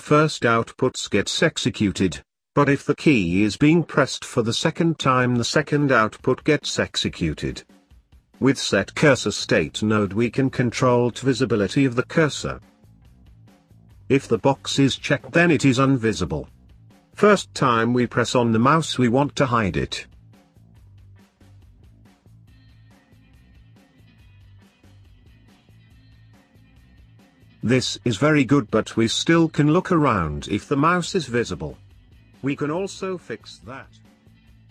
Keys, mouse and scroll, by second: 1.1 shift+a, 7.0 click, 9.8 click, 10.4 click, 10.7 shift+d, 12.2-13.9 drag, 15.1 click, 16.0 click, 18.3-21.5 drag, 34.0-34.7 scroll down 3.